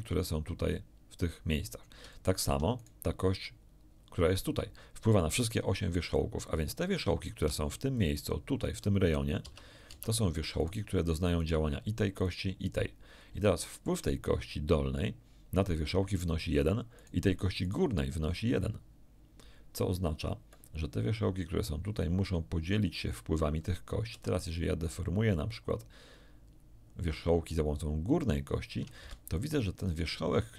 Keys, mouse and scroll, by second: 2.1 shift+middle click, 2.8 shift+middle click, 7.4 d, 7.7 d, 7.9 click, 9.4 Tab, 9.8 Tab, 10.6 right click, 11.4 right click, 12.2 right click, 13.4 shift+middle click, 16.9 right click, 17.6 right click, 24.0 r, 29.0 Escape, 29.8-30.5 scroll up 2.